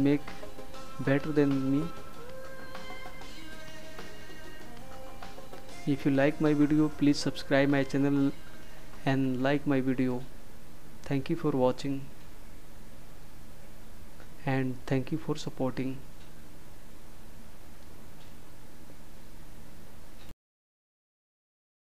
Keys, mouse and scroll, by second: 1.6 -, 6.5 click, 12.2 click.